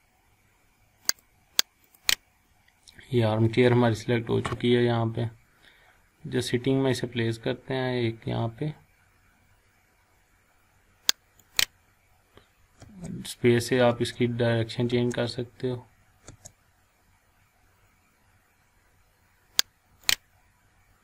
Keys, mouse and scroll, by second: 5.4 scroll down 1, 5.9 scroll up 1, 11.4 click, 11.6 click, 12.8 space, 20.0 click.